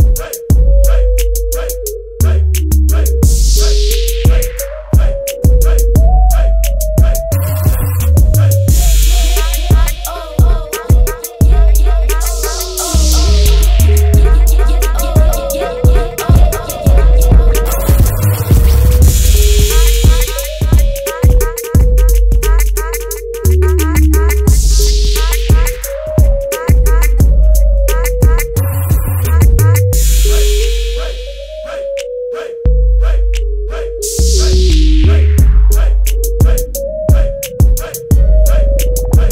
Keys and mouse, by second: 24.7 KP_0, 34.7 click.